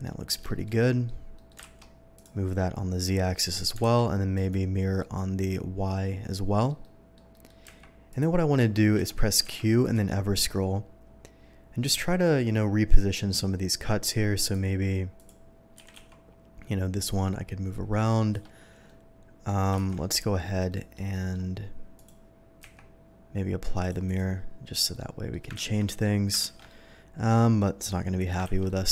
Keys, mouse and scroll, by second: 0.0 middle drag, 0.4 shift+middle drag, 0.8 shift+middle drag, 1.3 shift+middle click, 1.6 alt+x, 2.1 click, 2.5-3.5 middle drag, 3.8 alt+x, 4.3 click, 5.0-6.6 middle drag, 6.8-7.1 middle drag, 7.3 middle drag, 7.6 q, 8.1 click, 8.9 Escape, 9.1 middle drag, 9.4 q, 9.6 Escape, 9.8 click, 10.5 middle click, 13.5 middle click, 14.4 click, 15.1 click, 15.8 r, 16.0 z, 18.3 Escape, 18.8-19.4 middle drag, 19.8 shift+2, 20.1 shift+click, 20.4 shift+middle click, 20.7 middle drag, 21.1 middle drag, 21.9 click, 22.6 q, 23.8 click, 24.0 click, 24.9-25.3 middle drag, 25.2 q, 25.6 ctrl+z, 26.0-26.3 middle drag, 26.4 ctrl+shift+z, 26.6-28.2 middle drag, 28.5 ctrl+z, 28.6 middle drag.